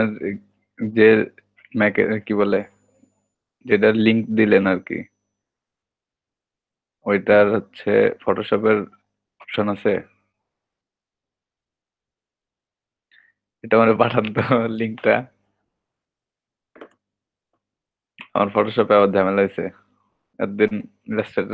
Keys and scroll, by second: 19.9-20.2 typing.